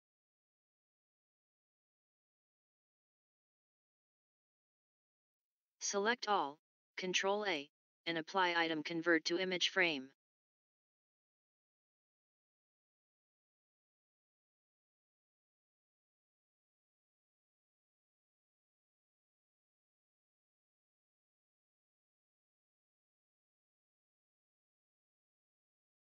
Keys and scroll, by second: 4.8 ctrl+a, 24.9 ctrl+a.